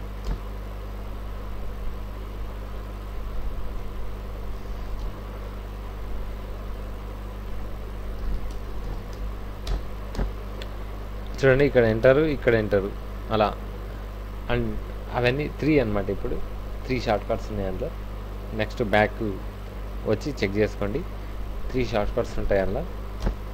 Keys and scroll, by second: 0.3 Tab, 5.0 alt+Tab, 8.2 alt+i, 8.2-10.1 typing, 8.5 Return, 9.7 Return, 19.5 ctrl+a, 19.7 c, 19.9 w, 22.0 w, 22.4 v, 22.7 v, 23.2 Tab.